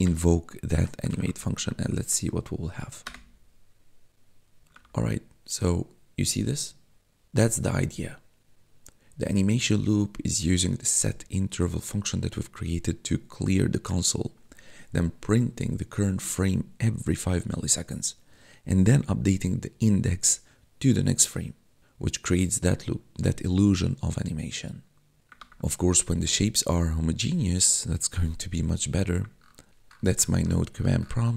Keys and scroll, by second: 0.0-2.0 typing, 2.9 Return, 4.8 4, 25.8 4.